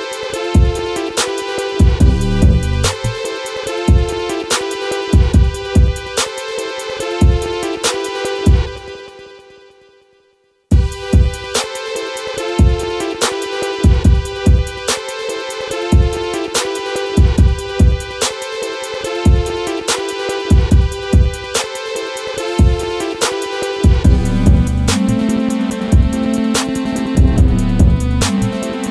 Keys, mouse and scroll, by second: 0.8 click, 4.1 right click, 5.0-12.8 drag, 14.0 scroll up 1, 15.1 click, 17.2 click, 19.6 right click, 20.1 scroll down 1, 20.4 click, 21.3 right click, 22.3 click, 28.5 F4.